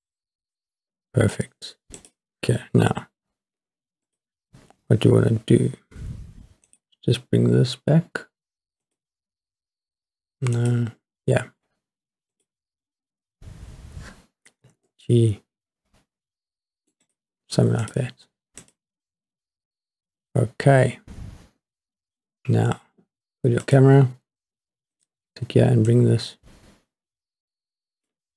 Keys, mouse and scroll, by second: 1.2-2.0 scroll up 1, 2.0 click, 4.1 click, 6.7 click, 8.8 click, 10.6 click, 12.3 click, 13.1 scroll down 3, 14.6 g, 14.9 middle click, 17.1 click, 17.8 click, 18.6 click, 23.6 click, 24.9 click, 25.9-28.1 drag.